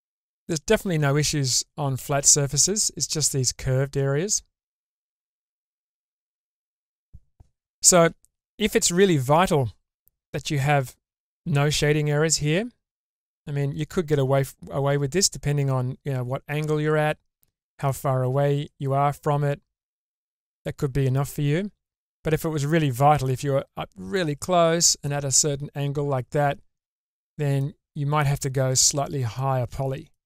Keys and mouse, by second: 3.2-4.8 middle drag, 5.0 Tab, 6.4 shift+middle click, 11.9 Tab, 13.1-17.8 middle drag, 19.1-20.5 drag, 21.4 Tab, 23.2 middle click, 24.2 Tab, 25.0-27.6 middle drag, 28.2 Tab, 29.4 click.